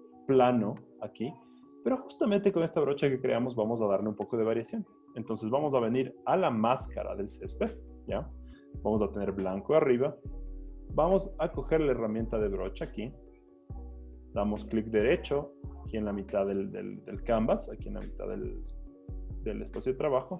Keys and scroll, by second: 1.6 z, 2.6 z.